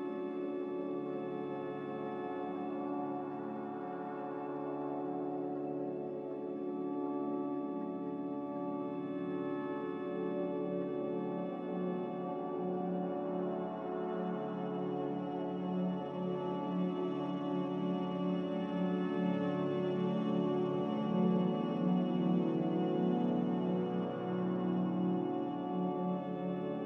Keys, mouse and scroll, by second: 7.3 ctrl+c, 7.8 ctrl+r, 8.4 a, 9.3 ctrl+r, 26.0 Return.